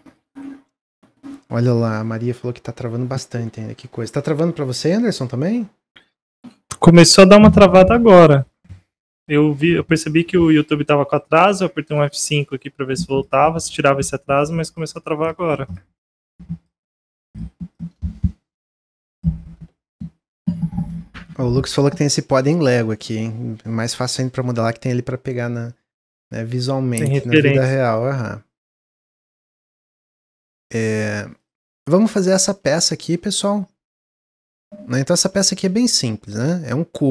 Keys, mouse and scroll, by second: 20.8-23.9 middle drag, 27.0-29.1 middle drag, 29.1 click, 29.6-31.3 middle drag, 31.3 click, 31.8-34.9 middle drag, 34.9 Tab, 35.3 shift+middle click, 36.0 2, 36.1 click, 36.6 middle click.